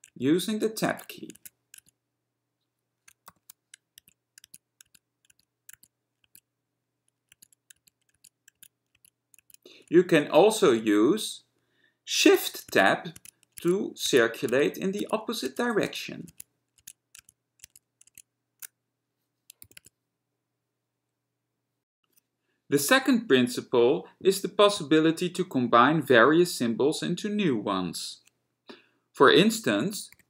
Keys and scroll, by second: 0.7 Tab, 1.1 Tab, 1.5-1.9 Tab, 3.6 <, 4.6 Tab, 5.0 Tab, 5.5 Tab, 7.2 Tab, 7.2 Tab, 7.5 Tab, 7.9 Tab, 8.3 Tab, 8.7 Tab, 9.1 Tab, 9.5 Tab, 10.8 shift+Tab, 12.4 shift+Tab, 12.8 shift+Tab, 13.4 shift+Tab, 13.7 shift+Tab, 14.2 shift+Tab, 14.6 shift+Tab, 15.1 shift+Tab, 15.6 shift+Tab, 16.0 shift+Tab, 16.4 shift+Tab, 16.9 shift+Tab, 17.4-18.0 shift+Tab, 19.9 shift+g, 19.9 Tab.